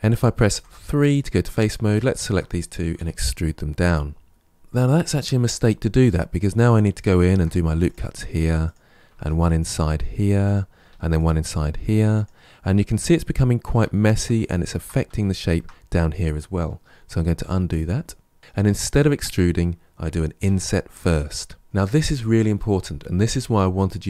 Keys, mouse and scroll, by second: 0.4 3, 1.4 click, 1.9 shift+click, 2.8 e, 7.1 ctrl+r, 9.0 ctrl+r, 10.7 ctrl+r, 12.7-13.9 middle drag, 13.9-15.0 scroll down 2, 15.0-16.8 shift+middle drag, 16.8 ctrl+z, 17.2 ctrl+z, 17.8 ctrl+z, 18.4 shift+middle click, 18.8-20.3 shift+scroll up 2.